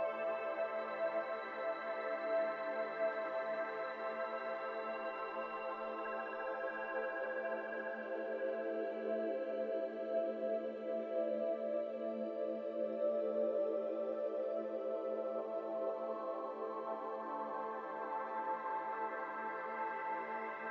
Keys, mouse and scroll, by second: 0.2 click, 0.9 click, 1.4 shift+click, 2.2 ctrl+KP_Subtract, 2.7 ctrl+z, 3.3 ctrl+KP_Add, 3.9 ctrl+z, 4.7 click, 5.2 shift+click, 6.1 ctrl+KP_Subtract, 7.5 ctrl+z, 7.9 click, 8.2 Tab, 8.3 middle click, 8.7 alt+z, 9.6 KP_1, 10.0 KP_3, 11.1 g, 12.5 shift+middle click, 12.7-13.0 scroll up 1, 13.0 1, 13.2 click, 14.2 g, 15.2 alt+z, 15.3 middle click, 15.6 Tab, 15.8 scroll down 2, 16.1 shift+click, 16.9 ctrl+KP_Subtract, 17.6 scroll down 1, 17.6-18.5 middle drag, 18.5 click, 19.1 click, 19.6 click, 20.0 Tab, 20.2 middle click, 20.5 alt+z.